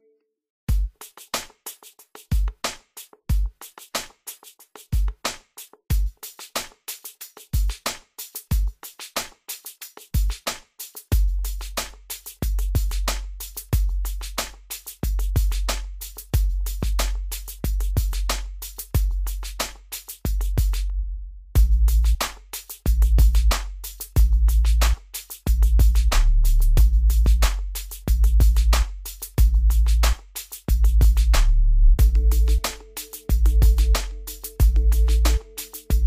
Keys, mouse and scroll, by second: 1.8 click, 3.9-4.2 scroll down 1, 4.9 scroll up 1, 6.4 scroll down 1, 7.3-8.4 scroll up 1, 8.4 click, 9.6 scroll down 1, 11.1 click, 12.2-12.8 scroll up 1, 13.0 middle click, 14.0-14.6 scroll up 1, 14.8 click, 16.4 scroll down 1, 18.2 click, 19.0 right click, 20.2-21.0 scroll up 1, 21.0 click, 21.4 middle click, 21.8 scroll up 1, 22.6 click, 26.0-26.4 scroll up 1, 27.0 right click, 28.2 click, 29.4 middle click, 29.9-30.2 scroll up 1, 30.3 scroll down 1, 31.3 click, 33.0 scroll down 1, 34.1 scroll up 1, 34.4 scroll down 1, 35.7 click.